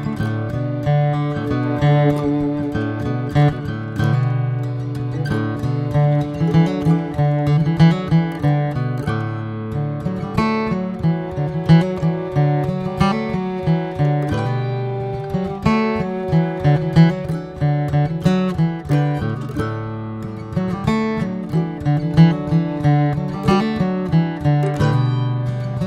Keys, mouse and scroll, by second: 1.6 click, 3.2 e, 6.6 click, 8.5 r, 13.1 click, 15.1 1, 15.4-16.0 scroll up 2, 17.2 click, 17.7 shift+middle click, 18.3 alt+z, 18.7 alt+z, 19.0 click, 20.4 click, 23.3 click, 23.9 click, 24.7 click, 25.4 click.